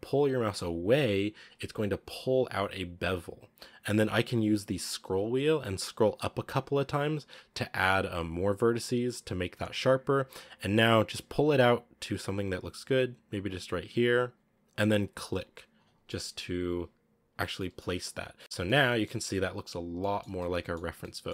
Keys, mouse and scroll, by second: 16.0-18.1 middle drag, 18.1 scroll down 1, 18.4 Tab, 18.5-19.1 middle drag, 19.1 scroll down 2, 19.2-19.6 middle drag, 19.6-19.9 scroll up 3, 19.9-20.8 middle drag, 20.8 scroll down 3, 20.9-21.2 middle drag, 21.2-21.3 scroll up 3.